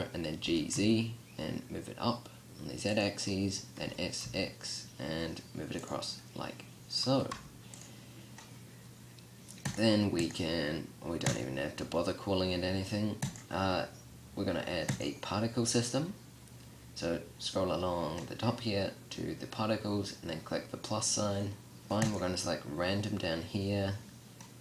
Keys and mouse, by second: 0.5 g, 3.0-3.9 drag, 3.9 s, 5.9-7.0 drag, 7.2 s, 22.0-24.6 drag.